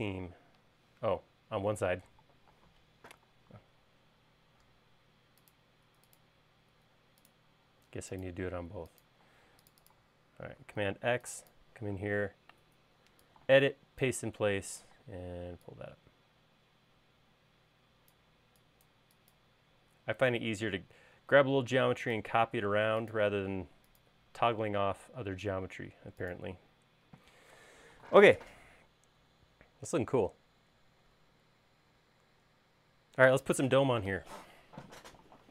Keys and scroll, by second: 0.6 Escape, 5.3 l, 9.3 space, 11.5 super+x, 15.5 p, 19.0 e, 21.9 l, 24.0 e, 25.3 space.